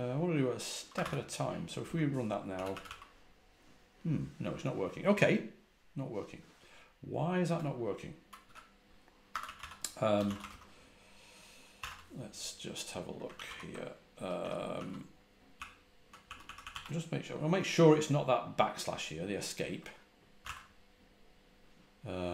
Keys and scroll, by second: 0.8 Escape, 0.9 k, 1.7 Return, 2.2-3.2 typing, 8.3-12.2 typing, 13.2 ctrl+a, 13.3-16.6 typing, 20.3 typing.